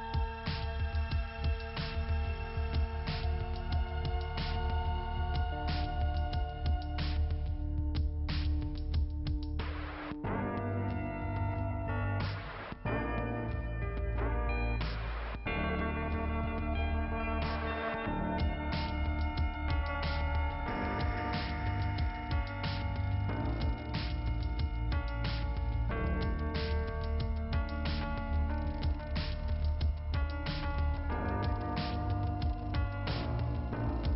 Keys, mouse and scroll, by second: 1.5 click, 2.1 scroll down 2, 3.0-3.5 scroll up 2, 4.9 click, 6.4 click, 7.3 click, 8.2 click, 8.9 right click, 10.3 click, 11.2 click, 17.0 click, 17.7 click, 18.0 click, 18.1 double click, 18.5 scroll down 1, 19.2 click, 20.2 middle click, 21.7 click, 25.3 right click, 26.7 right click, 29.5 scroll down 2, 29.6 scroll up 1, 29.7 scroll down 1, 29.8 scroll up 1, 30.7 scroll up 1, 32.4 middle click, 33.2 scroll down 1.